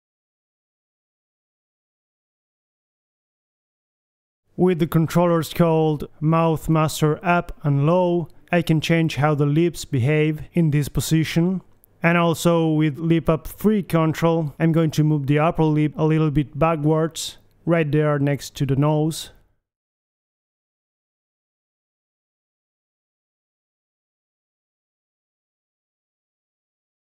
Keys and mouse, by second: 0.3 click, 0.7 g, 1.1 middle click, 1.2 click, 2.5 g, 5.3-6.8 drag, 6.9-8.4 typing, 9.6 right click, 10.2 right click, 11.6 right click, 11.6 r, 12.4 right click, 12.7 middle click, 13.2 click, 13.7 click, 13.8 right click, 13.9 middle click, 14.3 KP_3, 15.2 middle click, 16.2 right click, 16.7 click, 16.7 r, 18.7 right click, 19.2 click, 19.2 g, 22.1-23.1 middle drag, 23.1 KP_3, 23.5 middle click, 24.3 KP_3, 24.6-26.7 middle drag, 25.4 KP_3.